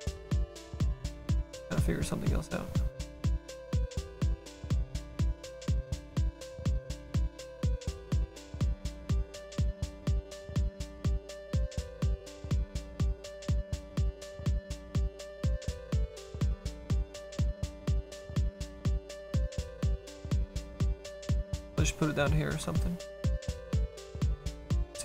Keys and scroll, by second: 14.7 s, 20.2 ctrl+z.